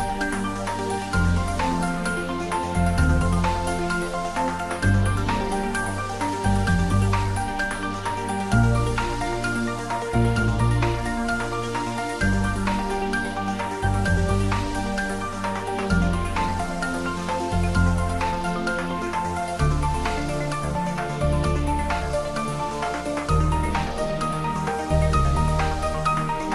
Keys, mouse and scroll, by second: 2.3-7.3 drag, 9.8 Tab, 10.4 click, 10.5 Tab, 10.8 click, 11.9 Tab, 12.9 click, 13.7 scroll down 1, 15.7 click, 17.7 click, 20.5 click, 24.8 d, 26.3 click.